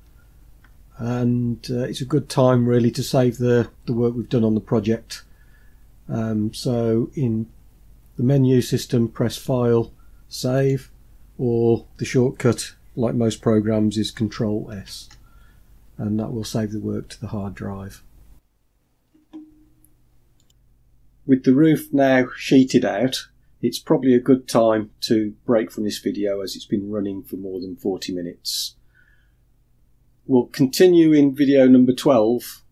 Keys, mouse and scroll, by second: 0.1 Tab, 9.4-10.8 drag, 14.8 ctrl+s.